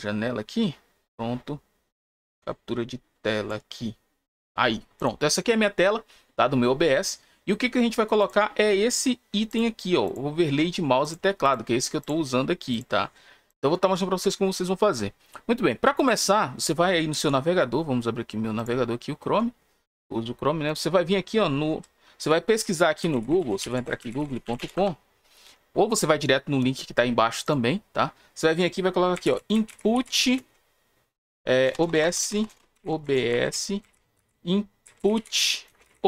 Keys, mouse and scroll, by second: 2.2-3.4 drag, 4.9 click, 8.1 click, 9.4 click, 10.0 click, 10.9 click, 11.3 click, 11.9 click, 12.6 click, 15.9 click, 18.5 click, 20.6 click, 23.5 e, 30.1 space, 33.2 s, 33.4 space, 35.6-36.0 typing.